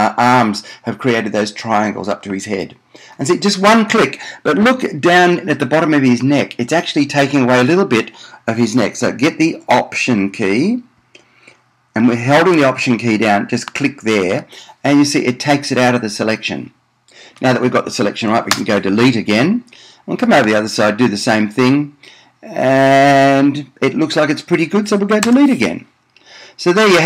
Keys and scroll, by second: 18.9 BackSpace, 25.5 BackSpace.